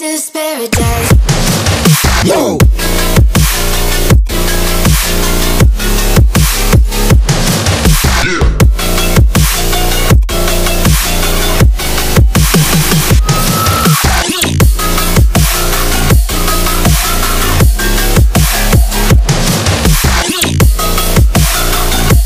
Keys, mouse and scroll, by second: 4.2-5.6 drag, 5.6 right click, 5.6 right click, 8.0 click, 10.1 click, 14.4 click, 15.6 right click, 17.9 click, 19.2-22.2 drag.